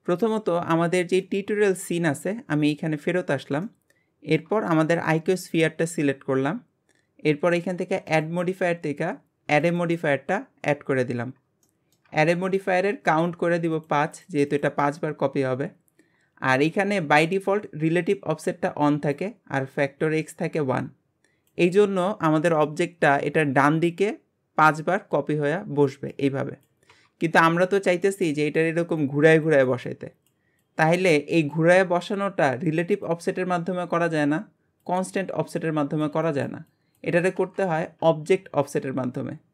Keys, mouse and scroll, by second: 1.2-3.3 middle drag, 3.3-3.6 scroll up 1, 3.6-4.6 shift+middle drag, 4.6-5.4 scroll up 1, 5.4 click, 9.8-11.1 drag, 11.1-11.6 scroll up 2, 11.6-13.7 shift+middle drag, 13.7-27.1 drag, 27.4-28.0 scroll down 1, 28.0-37.6 middle drag.